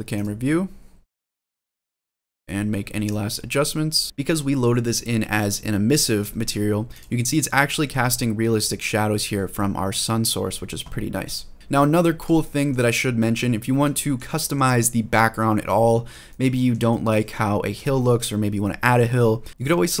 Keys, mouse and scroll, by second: 2.8-4.0 drag, 6.7 click, 11.5 shift+middle click, 11.5 scroll down 1, 12.2-12.5 shift+middle drag, 12.7-13.2 scroll up 1, 13.2-13.6 scroll down 1, 13.7-14.0 shift+middle drag, 14.1 middle click, 15.6-15.9 shift+middle drag, 16.1-16.5 middle drag, 16.6 shift+middle drag, 17.3 scroll up 1, 17.6 shift+middle drag, 18.0 scroll down 1, 19.5 shift+middle click.